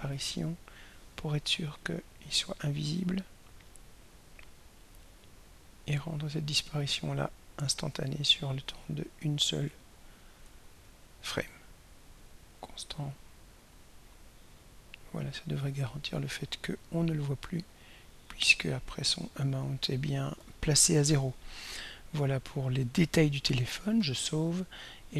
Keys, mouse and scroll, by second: 1.9 click, 4.0-6.0 drag, 6.7 click, 8.9 click, 10.8 right click, 13.5 click, 14.5-19.5 drag, 24.5 ctrl+s.